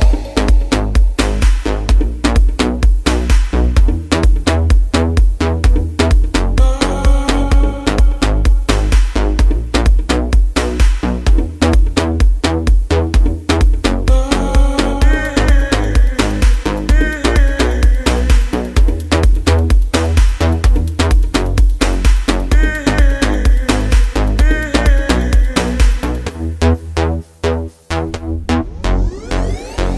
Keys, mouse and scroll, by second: 6.8-17.2 drag, 22.8 Delete, 26.4-29.9 drag.